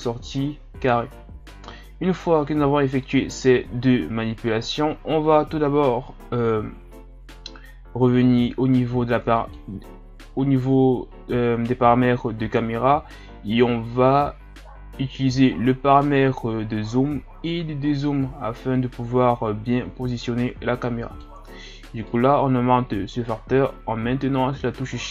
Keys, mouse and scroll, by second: 9.4 click, 18.0-21.1 drag, 22.0-25.1 shift+drag.